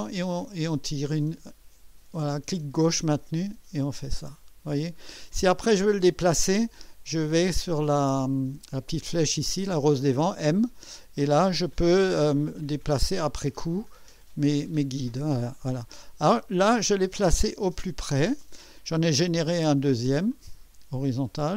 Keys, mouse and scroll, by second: 10.6 click, 13.7 click, 15.8-18.5 drag, 20.4-21.5 drag.